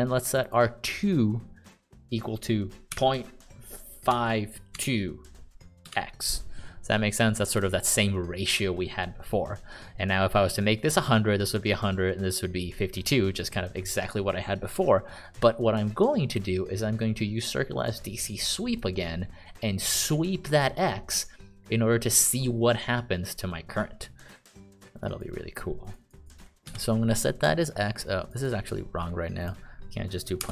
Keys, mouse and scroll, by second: 3.3 ., 4.5 5, 5.1 2, 6.2 x, 7.9 click, 27.0 x, 28.6 click, 28.7 click.